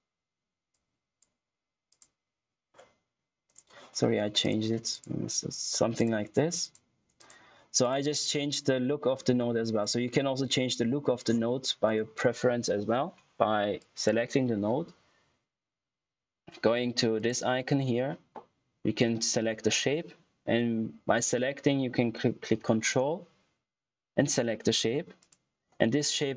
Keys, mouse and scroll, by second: 0.9 click, 0.9 typing, 9.0 scroll down 1, 9.3-9.7 scroll up 1, 9.7 click, 10.1 middle click, 10.2 scroll down 1, 10.3 middle click, 11.8 click, 13.7 click, 17.1 click, 17.1 typing, 22.5 ctrl+Num_Lock, 22.5 typing, 25.1 ctrl+click.